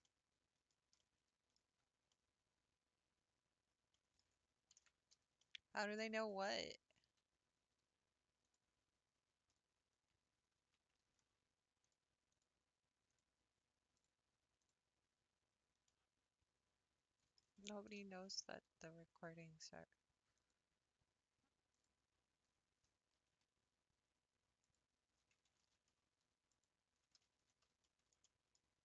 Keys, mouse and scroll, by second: 0.0 middle click, 0.6-1.0 scroll down 6, 1.0 middle click, 1.8 scroll up 5, 2.1-6.0 middle drag, 6.0-6.6 scroll down 3, 6.6 Tab, 8.5 click, 9.1-9.5 scroll up 1, 9.9 Tab, 10.6 Tab, 13.2-14.0 drag, 14.7 click, 15.4 scroll down 2, 16.0-20.5 middle drag, 20.5 click, 21.8 click, 24.7 shift+click, 25.8 ctrl+z, 26.6 shift+click, 27.6 ctrl+z, 27.8-28.8 shift+middle drag.